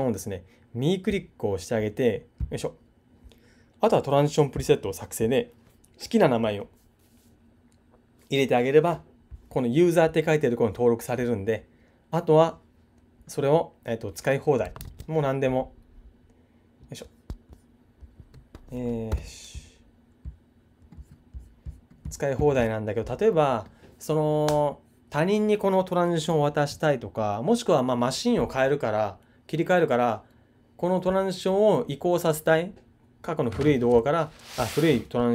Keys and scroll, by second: 14.8 super+Tab, 19.1 super+n.